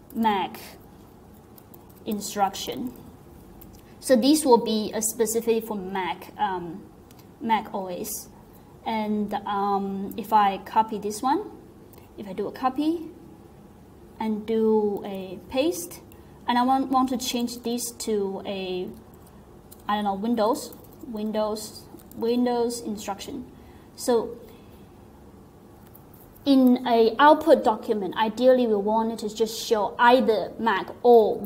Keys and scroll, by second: 0.0-3.4 typing, 15.0 alt+v, 17.3 BackSpace, 17.5 BackSpace, 17.6 BackSpace, 19.1-22.6 typing.